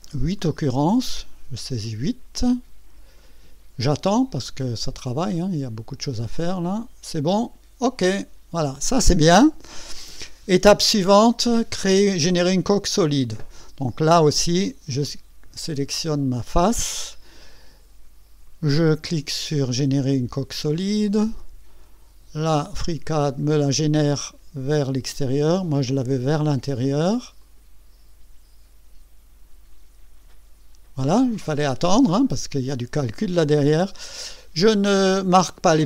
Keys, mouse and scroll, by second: 0.8 KP_8, 4.4 click, 5.3 right click, 6.2 click, 8.2 click, 10.7-11.7 drag, 14.5 click, 20.7 click, 22.9-23.3 scroll up 2, 27.4 click.